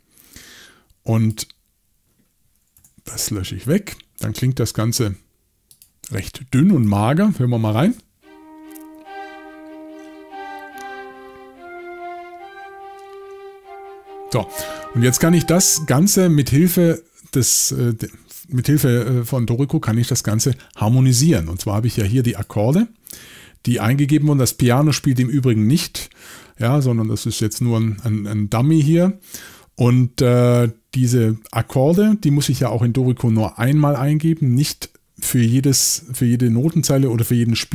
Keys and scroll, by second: 2.8 BackSpace.